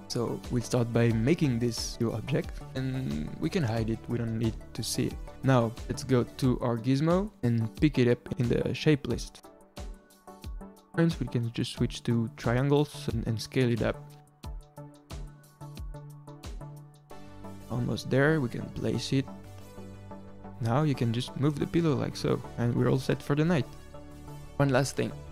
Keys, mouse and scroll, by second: 0.0-3.1 typing, 0.2 middle click, 0.3 Tab, 0.4 ctrl+r, 0.9 middle click, 1.1 ctrl+r, 1.5 click, 2.1 alt+click, 3.8 Tab, 4.0 middle click, 4.1 h, 5.3 click, 6.5 click, 11.3-12.3 middle drag, 12.3-16.1 drag, 16.1-18.6 middle drag, 18.6 g, 19.3 middle click, 19.7 g, 20.3 middle drag, 20.5 click, 23.5 scroll down 1, 23.8-25.3 middle drag.